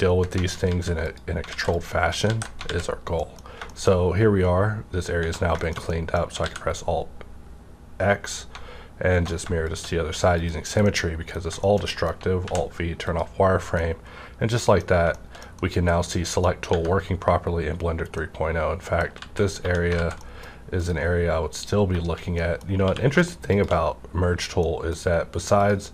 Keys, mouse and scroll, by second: 0.6 alt+z, 1.0 click, 1.5 alt+z, 2.3 ctrl+x, 2.6 alt+z, 2.7 alt+scroll up 1, 3.0 scroll down 2, 3.1 middle click, 3.6 shift+middle click, 3.7 scroll down 1, 5.2 Right, 5.3-5.8 scroll down 2, 5.6 middle click, 5.6 shift+middle click, 6.4 alt+x, 8.6-9.4 alt+scroll down 1, 9.6 click, 10.4 click, 10.8 middle click, 11.3 scroll down 1, 11.6 shift+scroll up 1, 11.8 shift+middle click, 12.4 alt+v, 13.0 click, 13.4 scroll up 1, 13.8-15.1 middle drag, 15.1-16.5 shift+middle drag, 16.5 scroll up 2, 16.7 Tab, 16.7 -, 18.0 scroll up 1, 18.1-19.6 middle drag, 19.2 alt+z, 19.6 1, 19.9 alt+z, 20.2 middle click, 20.8 click, 21.6 click, 22.4 middle click, 22.8 q, 23.5 click, 24.6 middle click.